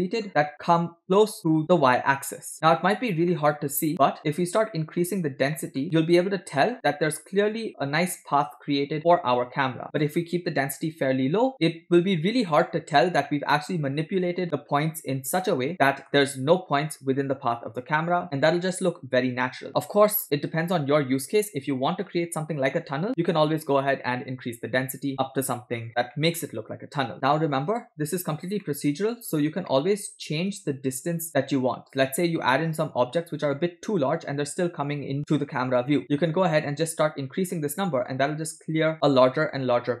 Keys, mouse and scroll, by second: 0.3-0.7 scroll up 10, 0.7 scroll down 1, 1.0 shift+middle click, 2.7 scroll down 6, 3.3-3.9 middle drag, 4.4 scroll down 1, 4.7 middle click, 5.4 scroll up 2, 5.6 middle click, 5.8-6.4 drag, 7.2-7.7 scroll up 5, 9.9-11.5 drag, 12.5-14.3 middle drag, 15.7 middle click, 23.5-25.9 drag, 26.2-27.1 middle drag, 27.1 click, 27.8-28.5 scroll down 6, 28.6 middle click, 29.2 scroll up 2, 29.7 middle click, 30.0 scroll up 1, 36.5-40.0 shift+drag.